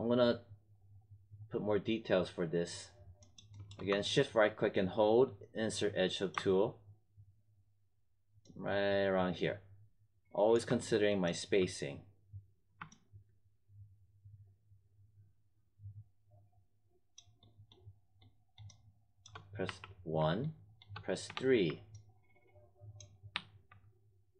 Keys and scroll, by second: 19.6 w, 21.2 3, 23.3 1.